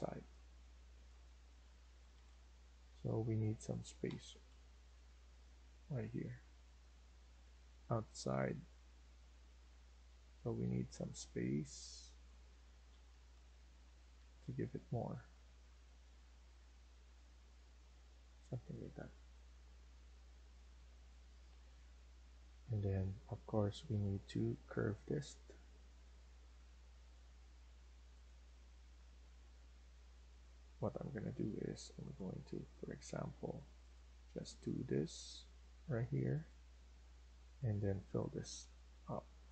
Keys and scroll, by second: 1.8 Left, 1.9 Left, 2.1 Left, 2.8 Escape, 4.3 Left, 4.6 Left, 4.9 Left, 5.1 Left, 5.5 Left, 6.1 Left, 6.5 Left, 6.8 Left, 6.9 Left, 7.3 Left, 7.8 Left, 7.9 Left, 8.2 Left, 8.5 Left, 8.9 Left, 9.1 Left, 9.3 Left, 9.5 Left, 9.7 Left, 9.8 Left, 10.3 Escape, 10.5 Escape, 12.8 Left, 12.9 Left, 13.5 Left, 13.5 Left, 13.7 Left, 14.0 Left, 14.8 Left, 15.0 Left, 15.2 Left, 15.3 Left, 15.5 Left, 16.3 Left, 17.5 Left, 18.3 Escape, 18.6 Escape, 18.9 Escape, 29.2 Escape, 29.5 Escape, 36.5 Escape, 36.9 Escape, 38.5 Delete.